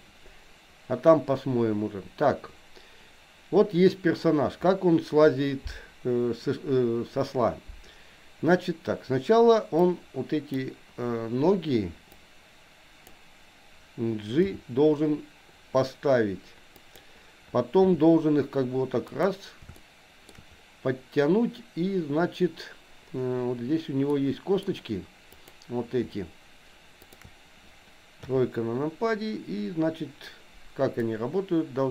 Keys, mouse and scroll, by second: 9.9 click, 12.1-13.1 drag, 14.4 g, 17.8 r, 19.8 shift+middle click, 24.1-25.3 middle drag, 25.3 click, 27.0 shift+click, 28.3 KP_3, 30.9-31.9 drag.